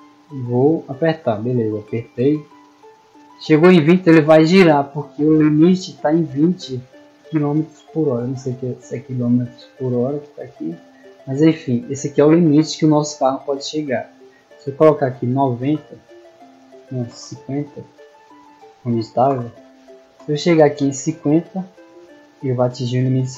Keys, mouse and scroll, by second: 1.3 w, 19.3-20.2 typing.